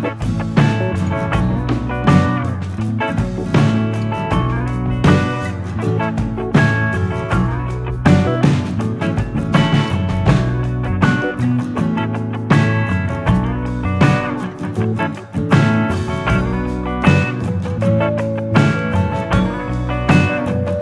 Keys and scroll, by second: 5.2 ctrl+], 6.1 ctrl+[, 14.3 ctrl+=, 15.8 ctrl+=, 20.5 ctrl+BackSpace.